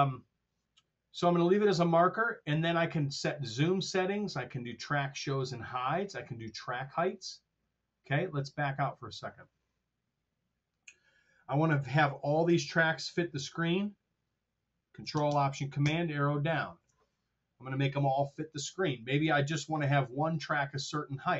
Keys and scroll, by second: 15.7 ctrl+alt+super+Down.